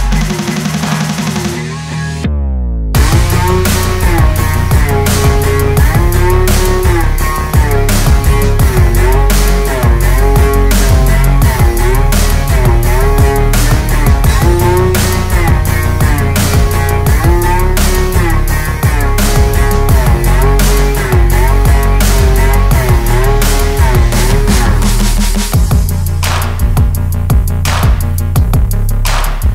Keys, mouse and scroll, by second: 0.0 scroll up 3, 0.1 click, 0.7 ctrl+s, 0.8 click, 1.1 shift+right click, 1.2 r, 1.4 alt+a, 1.7 click, 1.9 alt+a, 2.0 click, 2.1 click, 2.2 click, 2.4-4.0 typing, 2.9 alt+a, 3.1 click, 4.1 alt+a, 5.1 click, 5.5 click, 5.7 shift+d, 5.8 shift+right click, 5.9 s, 6.2 g, 6.6 g, 7.1 alt+a, 7.5 click, 7.8 click, 8.6 click, 13.3 click, 13.3 alt+a, 14.2 click, 16.0 click, 16.7-17.1 shift+right drag, 17.1 click, 17.2-18.3 typing, 17.6 scroll down 3, 17.8 alt+a, 18.5 alt+a, 19.2 click, 19.5 shift+right click, 19.7 click, 19.7 s, 20.1 alt+a, 20.2 click, 20.4 shift+right click, 20.5 shift+s, 20.7 click, 20.8 shift+right click, 20.9 shift+s, 21.0 alt+a, 21.6 click, 21.7 Tab, 22.9 click, 23.3 BackSpace, 23.9 u, 24.4 ctrl+i, 24.6 g, 25.1 Tab, 26.9 click, 27.4 shift+a, 27.8 f, 27.9 ctrl+shift+right click, 28.0 click, 28.9 click.